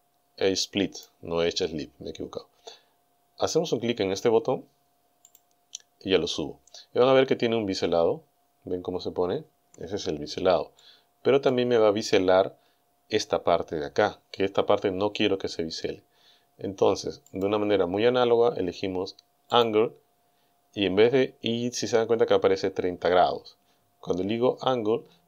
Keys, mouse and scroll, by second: 5.3 click, 7.7-8.1 scroll up 2, 10.8 shift+click, 12.4-12.8 scroll up 2, 15.6-16.0 scroll down 2, 17.3 click, 19.5 click.